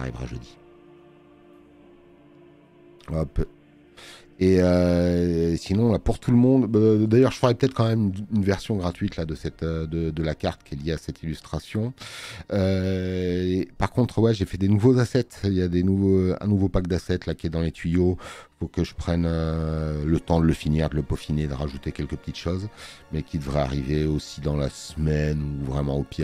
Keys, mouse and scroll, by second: 2.3 space, 2.4 click.